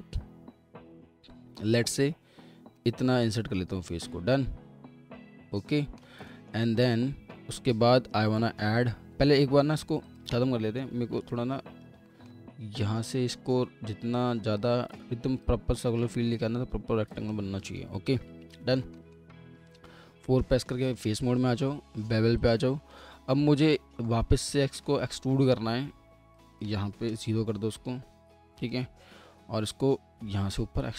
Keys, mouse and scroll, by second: 3.1 alt+middle click, 6.3 alt+middle click, 11.2 alt+w, 11.6 alt+w, 12.1 middle click, 12.5-12.8 scroll up 1, 13.2 1, 13.5 scroll down 1, 17.7 alt+w, 18.5 alt+middle click, 18.5 w, 19.0 alt+middle click, 19.7 4, 21.2 4, 22.9 alt+middle click, 24.3 middle click, 27.1 0.